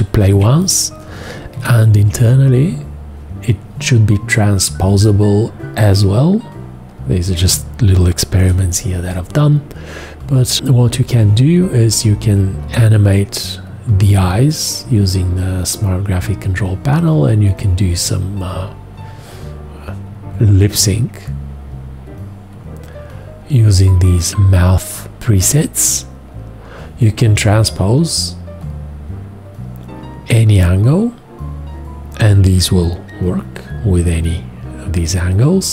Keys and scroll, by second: 0.3 2, 1.5 F2, 8.3 shift+x.